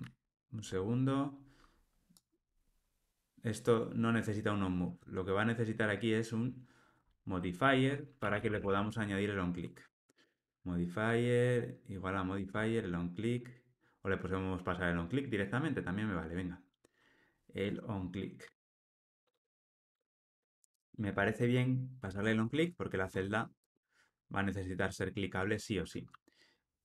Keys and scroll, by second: 0.0 super+z, 10.3 Return, 12.3 Tab, 22.5 ctrl+alt+o.